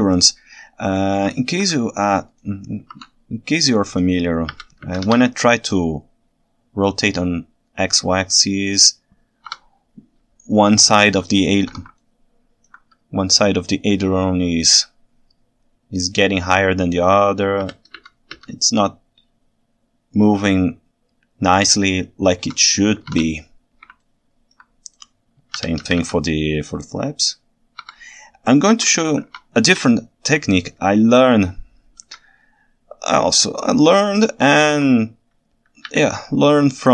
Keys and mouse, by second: 1.4 ctrl+alt+click, 4.5 r, 5.0 x, 10.7-11.0 ctrl+alt+middle drag, 11.3-11.6 ctrl+shift+middle drag, 11.6 ctrl+shift+right click, 12.0-12.7 ctrl+alt+right drag, 18.1 x, 23.1 alt+a, 24.0 ctrl+alt+right click, 25.6 r, 26.0 x, 26.1 x, 28.0 Escape, 28.8 ctrl+Tab, 29.3 alt+a, 29.9-30.5 ctrl+alt+right drag, 31.0-31.3 ctrl+alt+right drag, 32.0 KP_1, 34.3-34.8 ctrl+alt+drag, 35.9 KP_9.